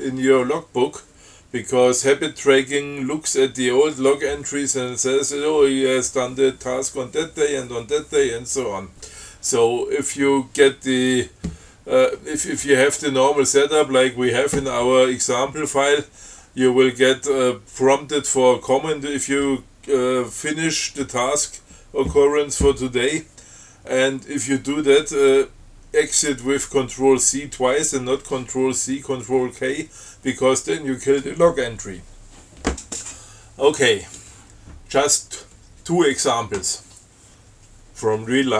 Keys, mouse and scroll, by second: 34.3 click.